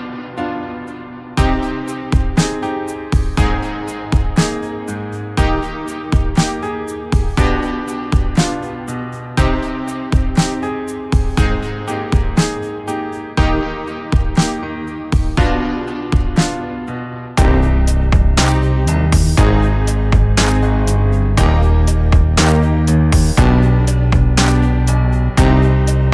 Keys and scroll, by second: 2.8 ctrl+-, 3.0 ctrl+-, 3.2 ctrl+=, 5.8 ctrl+=, 7.6 ctrl+-, 7.8 ctrl+-, 9.0 ctrl+=, 12.6 ctrl+=, 13.3 ctrl+=, 16.0 ctrl+-, 22.0 ctrl+-, 22.4 ctrl+=, 23.3 ctrl+-.